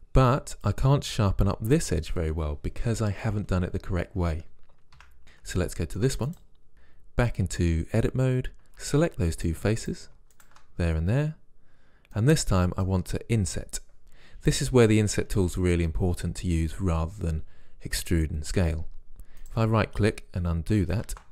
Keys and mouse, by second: 0.4-1.8 middle drag, 5.0 Tab, 6.7 Tab, 8.2 middle click, 8.8 ctrl+Tab, 9.8 click, 21.1 ctrl+z.